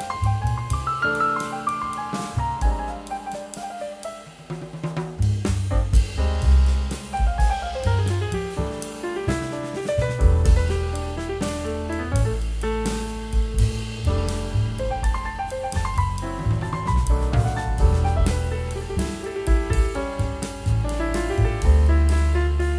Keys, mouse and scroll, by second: 8.0 double click, 21.6 double click.